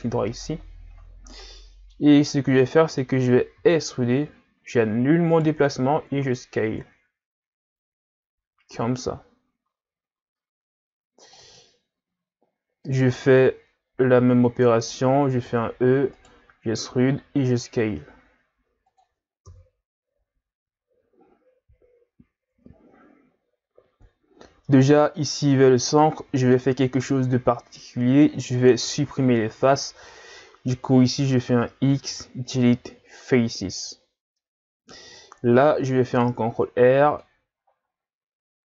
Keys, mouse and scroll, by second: 0.3-2.2 middle drag, 2.2-2.6 scroll up 3, 2.6-3.6 middle drag, 3.6 e, 6.0 s, 11.6-14.6 middle drag, 15.4 e, 17.0 s, 19.4 KP_3, 20.8-21.4 scroll down 2, 21.4-22.3 scroll up 4, 22.3-23.6 scroll down 2, 24.7-27.7 middle drag, 31.9 x, 34.0-34.4 scroll down 1, 34.4-36.1 middle drag, 36.1 ctrl+r.